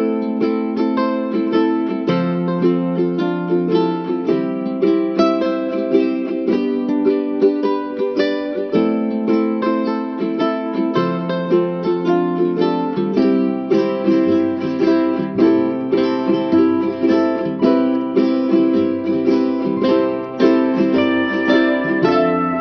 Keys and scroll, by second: 20.9 r, 22.3 e.